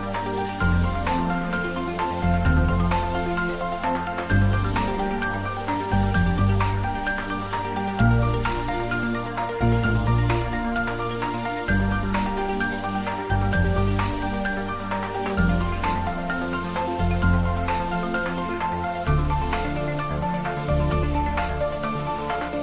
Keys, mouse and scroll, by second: 0.9 right click, 1.2 click, 1.5 middle click, 2.2 Tab, 2.9 click, 3.4 Tab, 3.9-5.4 ctrl+middle drag, 5.4 click, 5.9-6.7 shift+middle drag, 6.7 click, 8.7 click, 9.5 click, 12.1 shift+click, 12.6 shift+click, 13.0 s, 14.1 click, 15.2-16.7 drag, 16.7 s, 17.3 click, 17.6 z, 18.2 click, 18.5 ctrl+z, 18.9 middle click, 19.6 click, 20.0 shift+middle click, 20.7-22.4 shift+drag.